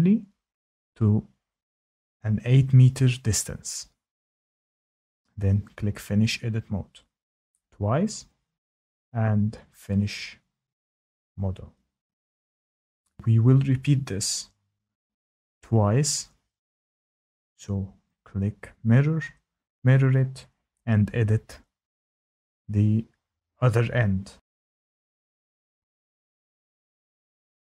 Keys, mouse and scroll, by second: 3.8-4.5 typing, 7.0 click, 8.4 click, 10.7 click, 15.4 click, 17.7 click, 20.1 click, 22.1 click, 23.3 click, 24.9 click, 25.0 click, 25.7 click, 25.7 click, 26.2 click, 26.2 click, 26.9 click, 27.5 Tab.